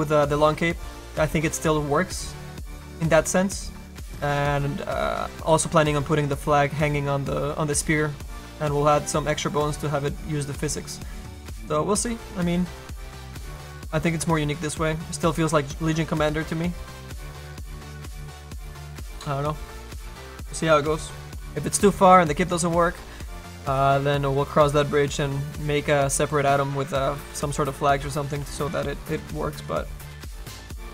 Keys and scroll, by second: 28.5 s.